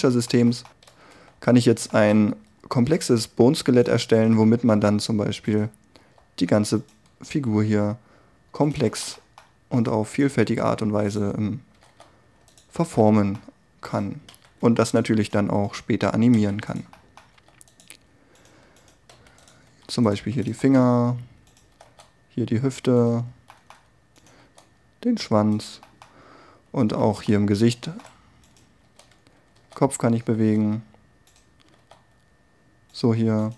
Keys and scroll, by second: 0.9 n, 1.3 t, 6.0 g, 11.8 r, 14.4 s, 17.4 r, 18.0 r, 19.2 s, 19.8 r, 24.5 g, 25.3 g, 28.9 g, 29.4 r.